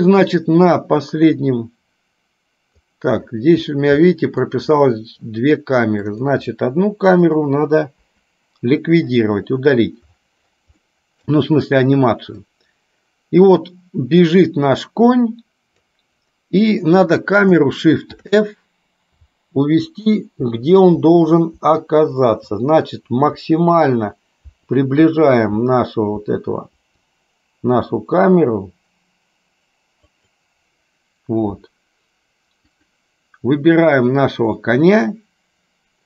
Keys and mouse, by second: 0.0-3.0 drag, 4.2 middle click, 6.1 click, 11.0 middle click, 12.6-16.1 drag, 32.7 click.